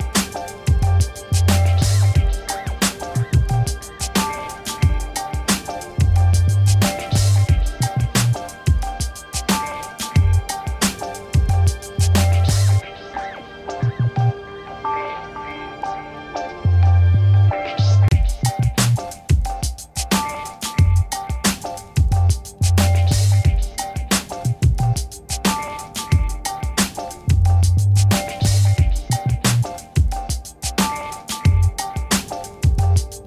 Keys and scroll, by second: 0.2 v, 4.5 ctrl+t, 14.9 space, 23.6 ctrl+-, 26.5 Return, 27.5 Right.